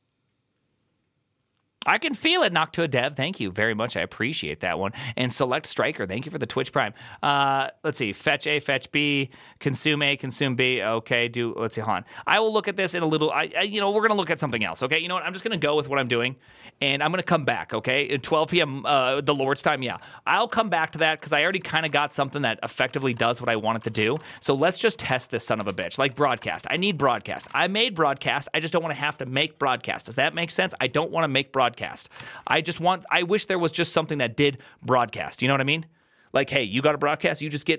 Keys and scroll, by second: 20.4 ctrl+c, 20.6 ctrl+c, 20.7 ctrl+:, 20.8-27.8 typing, 20.8 Return, 24.6 ctrl+u, 24.8 ctrl+u.